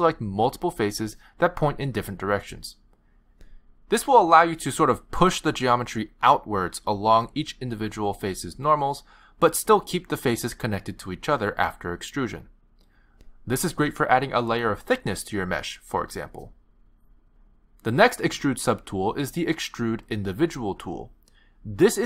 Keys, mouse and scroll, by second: 0.2 shift+click, 0.6 shift+click, 1.0 middle click, 2.4 middle click, 4.6 click, 8.6 middle click, 14.9 middle click, 17.2 ctrl+z, 17.8 middle click, 19.0 click, 21.5 ctrl+z.